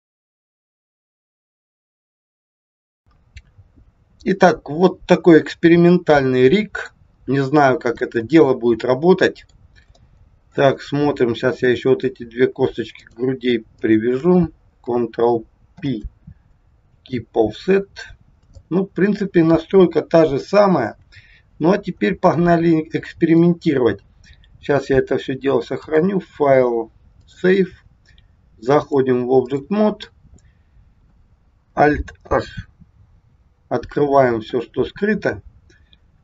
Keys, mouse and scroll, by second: 0.3 e, 0.6 click, 1.7 KP_1, 3.1 click, 3.7-4.6 scroll up 5, 4.6 middle click, 8.1 middle click, 10.1 shift+middle click, 11.1 scroll up 3, 11.8 click, 13.1 shift+click, 13.9 click, 15.7 ctrl+p, 17.6-18.1 scroll down 4, 18.5 scroll down 1, 18.7 shift+middle click, 20.9 KP_1, 22.0-22.3 scroll down 1, 22.5 shift+middle click, 25.8 click, 28.8 click, 33.1 alt+h.